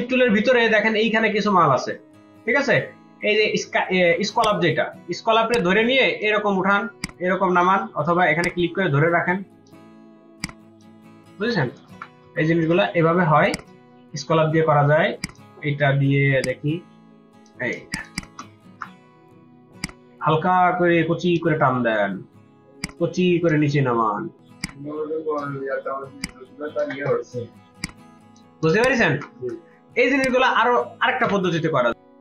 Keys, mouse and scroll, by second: 11.3 ctrl+z, 11.5 ctrl+z, 12.1 ctrl+z, 13.5 right click, 16.1 right click, 17.7 ctrl+space, 17.9 ctrl+click, 18.1 ctrl+double click, 18.2 ctrl+space, 18.6 ctrl+z, 28.6 ctrl+space, 28.8 ctrl+alt+click, 29.8 v, 32.1 right click.